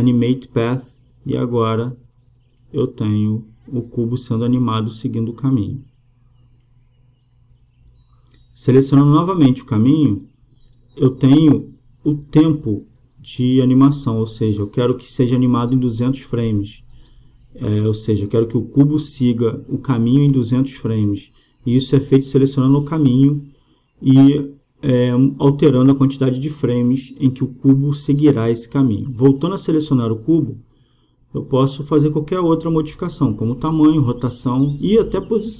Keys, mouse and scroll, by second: 1.9-3.5 drag, 3.7-5.5 drag, 10.5-12.4 right drag, 12.2-13.9 drag, 13.9-15.8 middle drag, 15.8-17.4 drag, 16.9 KP_0, 18.7-20.5 drag, 25.0-26.5 drag, 28.4-29.8 drag, 31.2-32.9 right drag, 32.2 s, 33.8-35.5 drag.